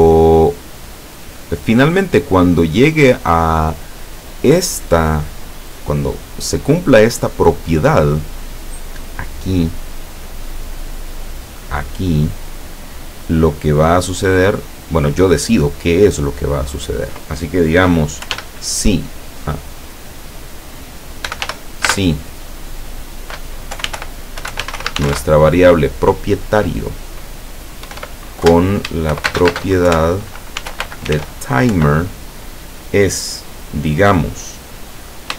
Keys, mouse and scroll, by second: 10.6 click, 14.6 click, 18.2 i, 18.3 f, 20.2 click, 21.2 i, 21.5 f, 21.9 space, 23.8-25.2 typing, 27.9-31.2 typing, 31.8 End.